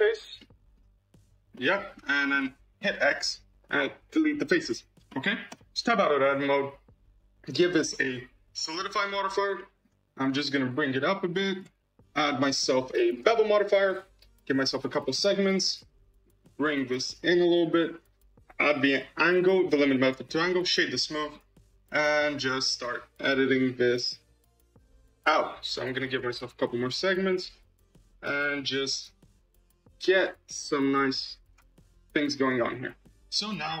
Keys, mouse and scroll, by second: 0.2 scroll up 1, 0.3 middle click, 1.1 shift+click, 1.4 middle click, 1.9 scroll down 4, 2.2 shift+middle click, 3.1 x, 4.5-5.0 scroll up 5, 5.0 shift+middle click, 5.4 Tab, 5.8-7.0 shift+middle drag, 7.0 click, 7.6-9.0 drag, 9.0 scroll up 4, 9.5 shift+middle click, 10.4-14.3 drag, 14.3-19.9 drag, 19.9-20.9 right drag, 20.9-23.3 shift+middle drag, 23.3-29.4 shift+drag, 30.1-32.4 shift+drag, 32.4-33.0 middle drag, 33.0-33.8 scroll down 5.